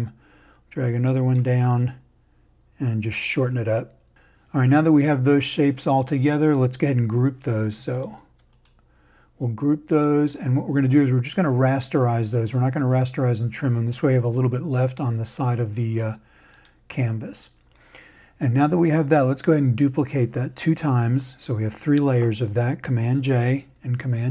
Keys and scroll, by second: 23.5 super+j.